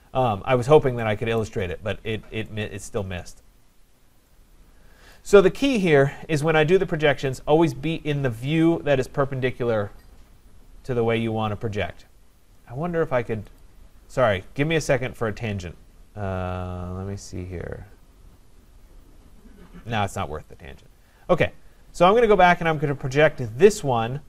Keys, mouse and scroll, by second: 0.6-1.2 scroll, 1.4 right click, 2.0-2.5 scroll, 2.8 middle click, 2.8 right click, 3.3-3.9 scroll, 5.1 right click, 7.4 click, 8.0 scroll down 4, 13.6 click, 20.6 click, 22.7 click.